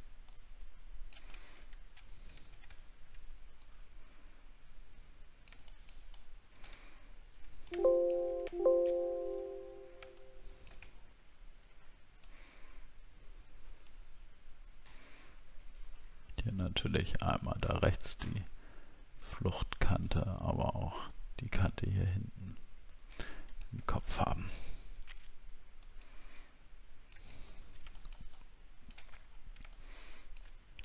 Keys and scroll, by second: 1.9 alt+scroll down 1, 2.7 alt+scroll up 3, 6.9 alt+scroll down 1, 11.0-11.9 alt+scroll down 5, 24.0 alt+scroll up 1, 27.5 alt+scroll down 1, 29.2 alt+scroll down 1.